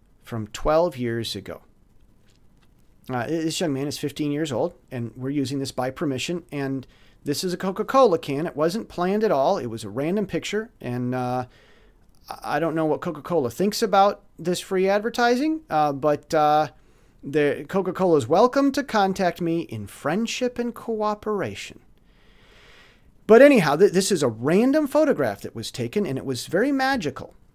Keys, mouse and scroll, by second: 1.5 click.